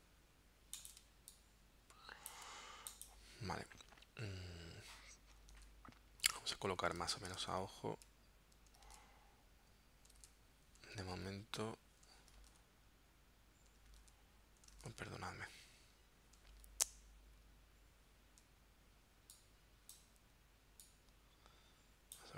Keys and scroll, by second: 1.0 space, 5.6 super+Tab, 7.1 super+Tab, 7.4 super+Tab, 8.9 super+Tab, 10.2 super+Tab, 11.1 super+Tab, 12.4 super+Tab, 13.9 super+Tab, 14.9 super+Tab, 16.5 super+Tab.